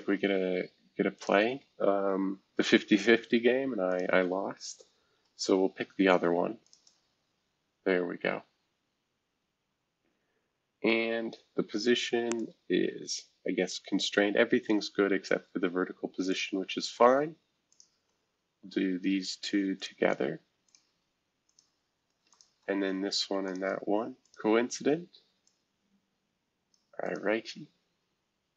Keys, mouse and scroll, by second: 1.1 click, 2.4 ctrl+z, 3.9 click, 4.4-4.8 scroll down 1, 5.4 scroll down 1, 5.9-6.6 scroll up 2, 6.6-7.8 shift+drag, 7.0 e, 7.8 scroll up 1, 8.3 scroll down 1, 8.7 scroll up 1, 10.9 click, 12.3-13.7 drag, 14.0 click, 16.3 click, 17.7 shift+click, 19.8 click, 20.6 click, 21.4 click, 22.3 shift+click, 23.5 click, 24.2 click, 25.4-26.7 drag, 27.0 click.